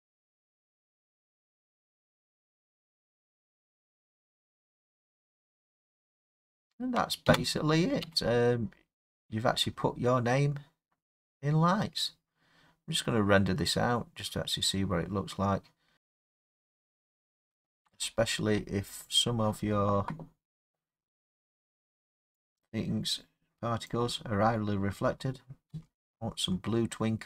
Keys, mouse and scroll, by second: 3.9 scroll, 7.3-9.1 middle drag, 7.3 space, 8.1 space.